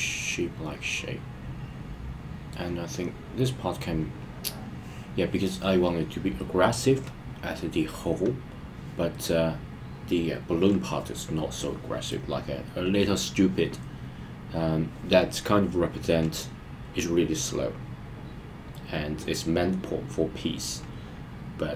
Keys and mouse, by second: 12.1-13.3 middle drag.